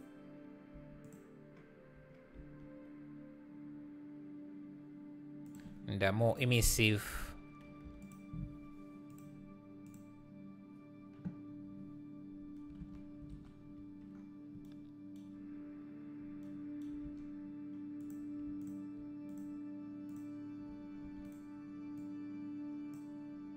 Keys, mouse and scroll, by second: 0.7 Tab, 1.0 click, 2.3 s, 8.0 click, 9.8 click, 12.8 alt+a, 18.6 shift+click, 19.4 click, 20.2 click, 21.0 shift+d, 22.0 click.